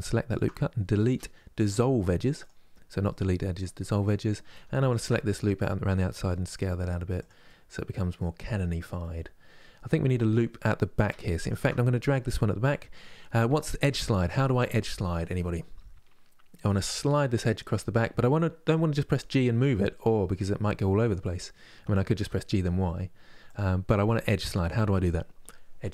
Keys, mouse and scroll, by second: 0.7 Delete, 2.7-4.2 middle drag, 4.2 2, 4.6 alt+click, 4.9 middle click, 5.9 s, 7.1-8.3 middle drag, 8.3-8.7 scroll down 1, 8.7-11.1 middle drag, 11.1-14.2 alt+drag.